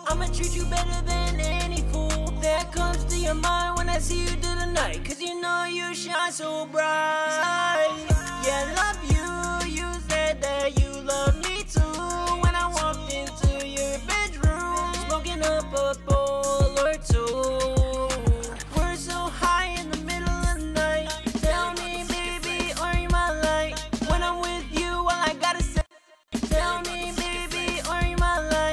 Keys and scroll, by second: 0.9 e, 1.4 ctrl+Page_Down, 1.5 ctrl+Page_Down, 2.2 e, 3.0 ctrl+Page_Down, 3.1 ctrl+Page_Down, 3.3 ctrl+Page_Down, 4.2 super+s, 6.9 super+s, 8.9 h, 10.2-15.0 typing, 11.2 Tab, 12.8 Tab, 16.0 super+s, 22.3 super+s, 23.8 e.